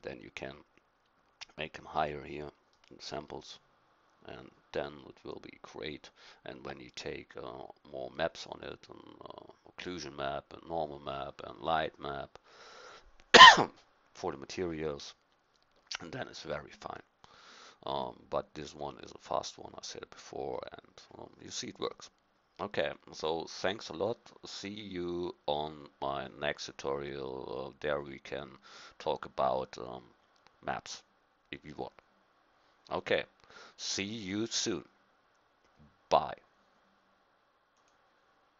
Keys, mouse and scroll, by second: 2.7-9.4 middle drag, 10.8-16.4 middle drag.